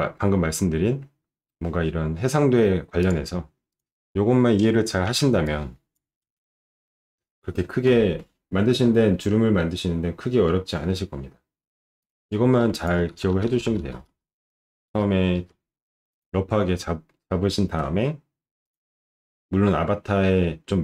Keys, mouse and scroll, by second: 0.8 middle click, 3.0 click, 3.7 click, 5.0 ctrl+shift+9, 12.0 click, 12.7 click, 13.1-15.4 typing, 16.1 click, 18.6 shift+click.